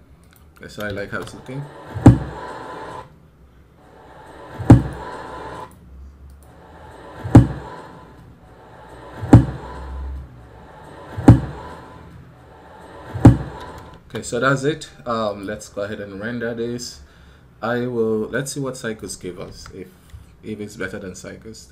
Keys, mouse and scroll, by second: 0.0-21.7 drag.